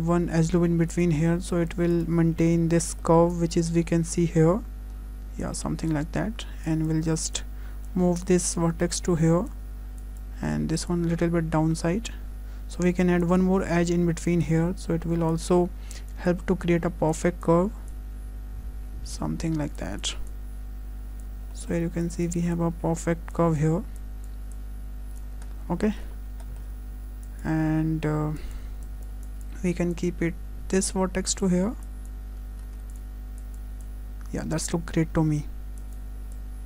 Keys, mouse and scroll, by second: 0.9 click, 2.5-2.8 scroll up 3, 2.8 shift+middle click, 3.3 click, 5.9 click, 7.9 click, 8.2 click, 12.1 click, 13.2 click, 14.4 click, 16.1 click, 17.1 click, 19.4 click, 21.2 click, 21.5 shift+middle click, 22.0 click, 23.3 click, 25.2 click, 25.5 scroll down 2, 25.5 click, 25.9 shift+middle click, 26.2 scroll up 1, 26.4 shift+middle click, 27.3 click, 31.4 click, 34.6 click, 35.8 click.